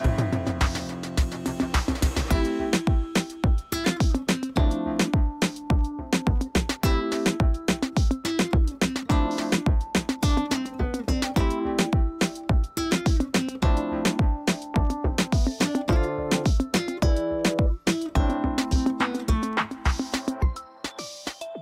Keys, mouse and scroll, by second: 0.4 s, 0.9 space, 1.0-1.7 click, 1.4 space, 3.3 alt+click, 4.4 ], 4.6 ], 4.7 ], 5.1 click, 7.4 space, 8.2 click, 9.9 ctrl+e, 11.0 click, 12.3 space, 12.9 alt+click, 13.9 alt+click, 21.3 click.